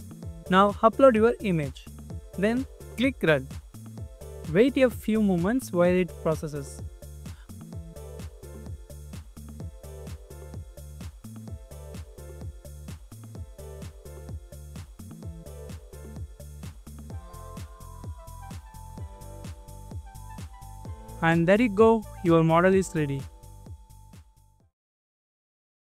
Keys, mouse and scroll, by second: 6.8 scroll down 1, 7.5 scroll up 1, 9.2 scroll up 1, 9.3 scroll down 1, 9.5 scroll up 1, 9.6 scroll down 1, 9.7 scroll up 1, 9.8 scroll down 1, 10.1 scroll up 1, 13.3 scroll down 1, 13.4 scroll up 1, 19.0 scroll down 1, 19.2 scroll up 1, 21.4 double click, 21.7 scroll up 1, 21.9 scroll down 1, 22.2 double click.